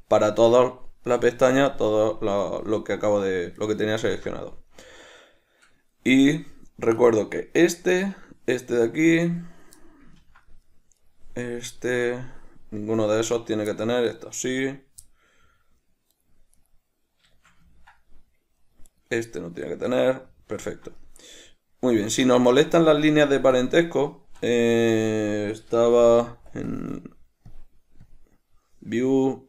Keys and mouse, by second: 1.2 right click, 2.5 right click, 3.7 right click, 4.2-7.1 middle drag, 7.1 right click, 8.2 right click, 10.0-11.2 middle drag, 11.2 right click, 11.8 right click, 13.3 right click, 13.9-16.3 middle drag, 16.3 right click, 16.7 right click, 17.5-19.0 shift+middle drag, 19.0 right click, 20.4-23.7 middle drag, 23.7-26.9 drag, 25.2 Escape, 27.6 click.